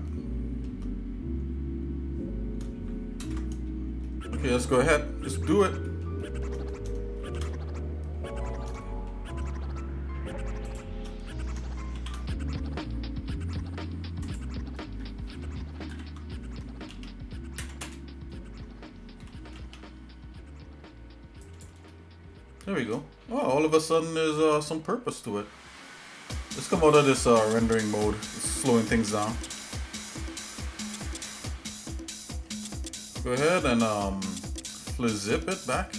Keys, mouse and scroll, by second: 3.3 ctrl+KP_Add, 4.0 shift+middle click, 5.8 ctrl+KP_Add, 5.8 shift+middle click, 6.2 shift+middle click, 7.2 shift+s, 8.8 shift+middle click, 10.7 shift+right click, 12.0 shift+d, 16.0 ctrl+m, 19.4 g, 21.9-22.9 shift+middle drag, 23.2-23.8 scroll up 2, 24.1 shift+middle click, 27.0 click, 29.0 g, 31.4-32.5 shift+middle drag, 34.0 alt+n, 35.3-35.9 shift+middle drag.